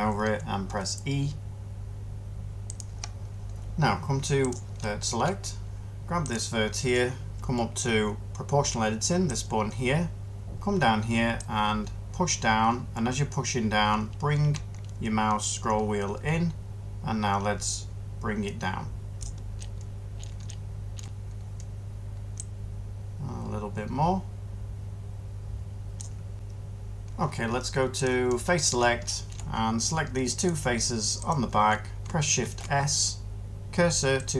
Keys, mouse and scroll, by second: 0.6 e, 32.3 s.